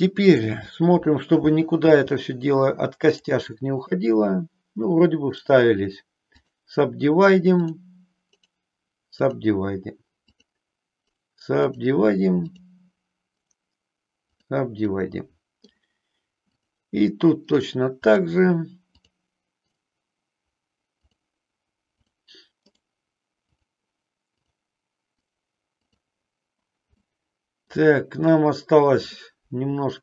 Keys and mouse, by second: 0.3 click, 1.9 g, 3.1 click, 3.8 click, 10.3 click, 13.2-14.9 right drag, 14.9 middle click, 16.5 click, 24.3 click, 27.1 middle click, 29.2 middle click.